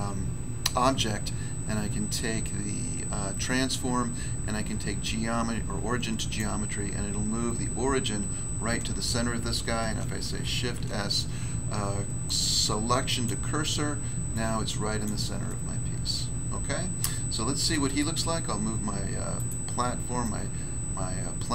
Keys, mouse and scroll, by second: 6.1 click, 6.3 click, 10.2 s, 13.0 click, 13.2 click, 14.2 click, 15.0 click, 15.4 middle click, 17.6 middle click, 17.8 middle click, 17.8 scroll down 1, 17.9 middle click, 18.5 scroll down 1, 19.3 right click, 19.4 right click, 20.2 click.